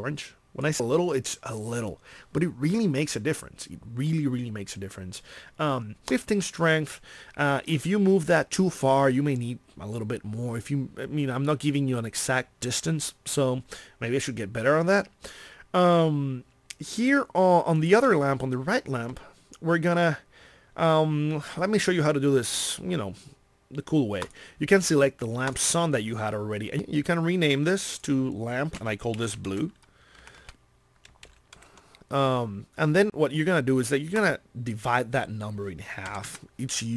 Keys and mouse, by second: 0.2 middle click, 17.8-19.7 drag, 28.0 click, 30.6 BackSpace, 31.8 BackSpace.